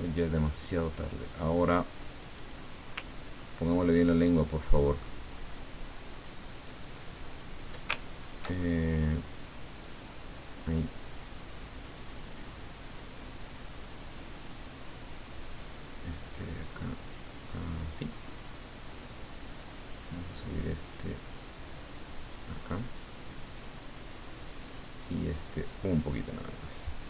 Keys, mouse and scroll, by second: 1.4 click, 2.3 click, 3.3-4.0 ctrl+scroll up 4, 4.1-5.3 ctrl+middle drag, 6.5 click, 9.7 click, 12.0 click, 15.6-19.7 drag, 20.1-21.3 drag, 21.7-24.4 drag, 25.9-27.0 drag.